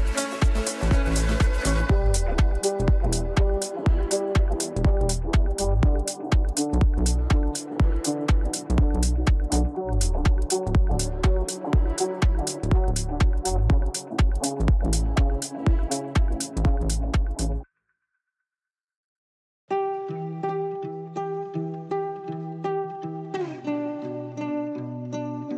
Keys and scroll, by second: 12.8 g, 15.6 ctrl+z, 20.0 g.